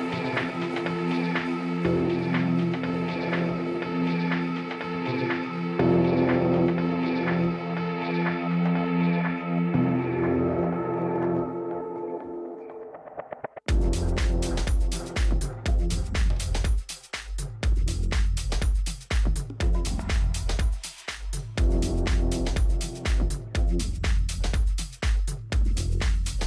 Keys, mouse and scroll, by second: 5.3-8.0 middle drag, 7.7-9.6 drag.